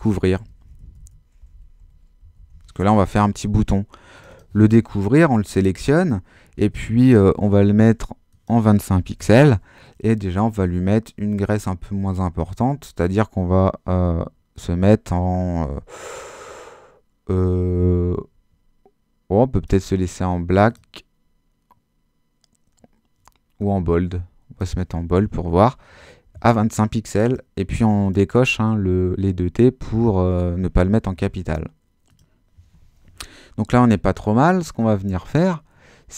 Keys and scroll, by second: 0.0-3.0 typing, 8.7-9.7 typing.